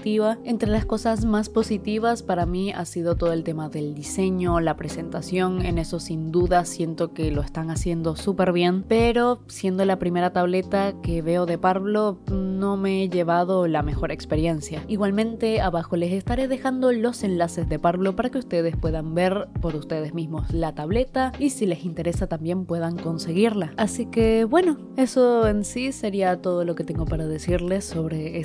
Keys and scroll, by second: 0.0-0.9 typing, 2.5-4.5 typing, 5.2 ctrl+z, 5.7-8.8 typing, 11.1 i, 11.4 i, 11.5 i, 12.8 i, 13.2 ctrl+z, 13.9 ctrl+z, 14.1 ctrl+z, 14.9 ctrl+z, 15.1 ctrl+z, 15.3 ctrl+z, 15.7 ctrl+z, 16.0 ctrl+z, 16.2 ctrl+z, 16.7 i, 17.2 ctrl+z, 17.4 ctrl+z, 18.2 ctrl+z, 18.5 space, 19.3 space, 19.5 space, 19.7 i, 20.3 ctrl+z, 20.6 ctrl+z, 20.9 ctrl+z, 21.6 ctrl+z, 21.7 ctrl+z, 23.2 i, 23.4 i, 24.0 ctrl+z, 24.3 ctrl+z, 24.4 ctrl+z, 25.2 ctrl+z, 26.1 ctrl+z, 26.6 ctrl+z, 26.8 ctrl+z.